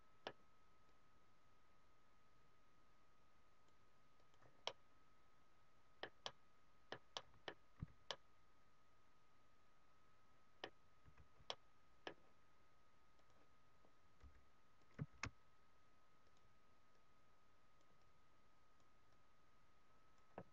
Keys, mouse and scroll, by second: 0.9 click, 4.1 click, 4.7 middle click, 6.3 middle click, 7.2 middle click, 7.7 z, 8.0 middle click, 10.9 z, 11.4 middle click, 13.3 click, 14.1 f, 14.9 click, 15.1 shift+f, 16.5 click, 16.9 click.